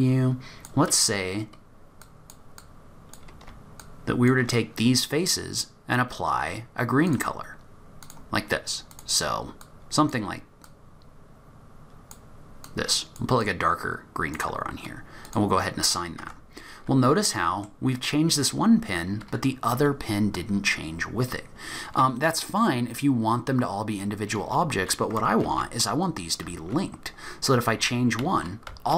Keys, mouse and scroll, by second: 2.0 click, 2.6 click, 3.8 shift+click, 7.1 click, 8.0 click, 8.9 click, 15.2 click, 16.2 Tab, 16.9-18.3 scroll down 3, 17.3 middle click, 25.5 ctrl+z, 26.5 ctrl+z, 27.8 ctrl+z, 28.2 ctrl+z, 28.7 ctrl+z.